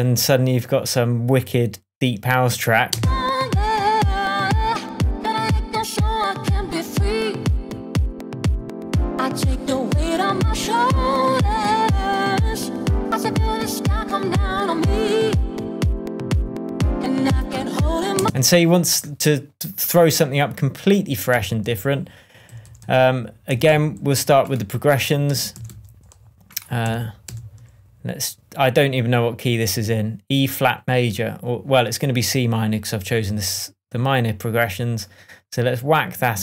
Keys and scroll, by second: 2.9 space, 18.2 space, 21.3 Right, 22.5 Down, 23.5 Down, 23.7 Right, 25.3 Up, 25.5 Down, 25.7 Right, 26.8 Down, 27.2 Up, 27.5 Right.